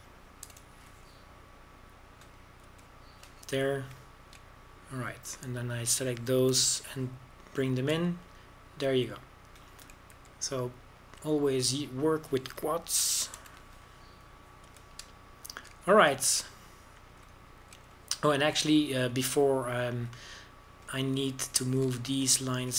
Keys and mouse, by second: 0.0 g, 2.3 g, 4.5 a, 8.4 g, 9.8 a, 11.4 click, 12.0 z, 15.2 f, 16.5 a, 20.2 middle click, 20.7 click.